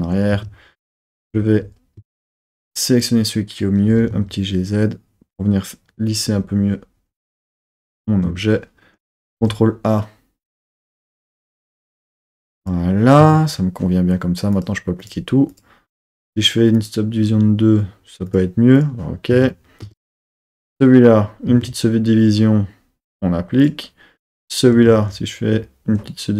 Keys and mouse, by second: 0.1 super+z, 0.3 Tab, 1.3 z, 2.0 Tab, 2.7 click, 3.8 g, 4.1 z, 6.1 click, 9.3 ctrl+a, 12.6 click, 13.1 Tab, 14.5-15.1 drag, 15.4 click, 16.7 click, 18.2-18.9 drag, 19.3 Tab, 19.7 Tab, 20.0 click, 21.4 super+1, 23.6 click, 24.1 click, 24.8 super+1.